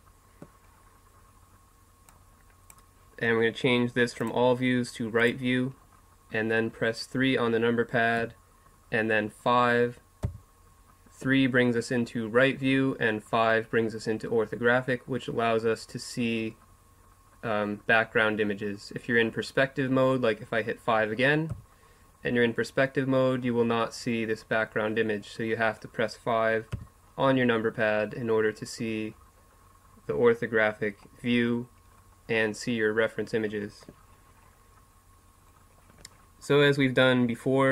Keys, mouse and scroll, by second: 2.1-3.9 drag, 4.2-6.0 drag, 8.2 KP_3, 10.4 KP_5, 21.5 KP_5, 26.7 KP_5, 30.9-37.7 middle drag.